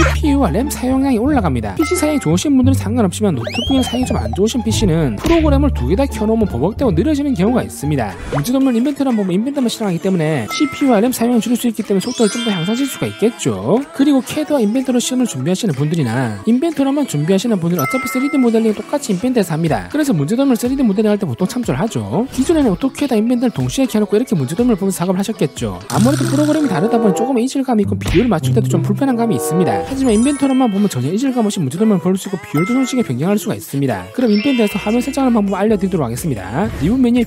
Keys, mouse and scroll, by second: 8.7 click, 9.1 middle click, 10.3 click, 11.1 click, 11.7 click, 12.7 click, 13.9 click, 14.4 click, 14.8 middle click, 16.0 click, 17.4 click, 17.7 middle click, 18.5 click, 18.8 middle click, 20.4 click, 21.3 click, 21.6 middle click, 22.6 click, 23.4 click, 24.3 click, 25.3 click, 26.2 click, 28.3-29.3 drag, 29.5 click, 29.7 click, 31.0 click, 31.9 click, 32.8 click, 33.5 click, 34.2 click, 35.0 click, 36.2 click, 36.5 scroll up 2.